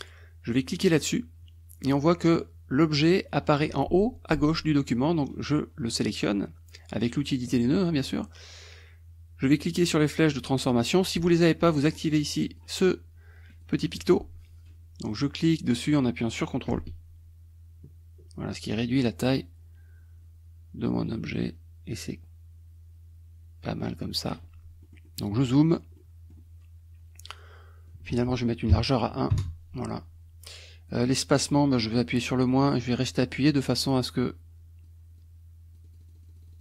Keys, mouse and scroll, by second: 0.9 click, 5.2-7.6 drag, 11.8 click, 12.4 click, 13.5 click, 14.0 click, 15.5-24.5 drag, 24.9 middle click, 25.8 middle click, 26.0 middle click, 27.9 click, 28.7 KP_1, 29.3 Return, 30.9 click, 32.0-33.2 drag, 33.3-35.1 drag, 35.2-36.6 drag.